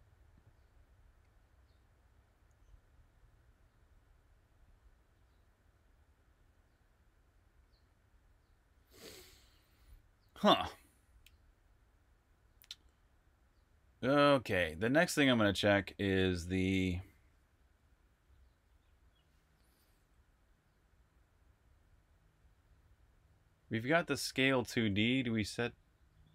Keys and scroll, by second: 15.1 super+Tab, 16.2 super+Tab, 23.4-24.1 typing, 26.0-26.3 typing.